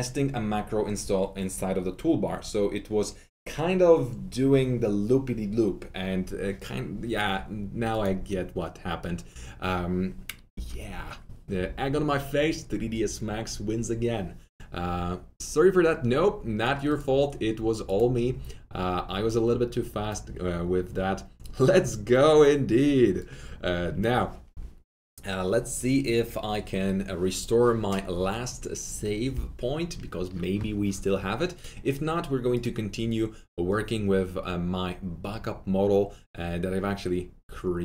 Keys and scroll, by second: 10.2-10.9 typing.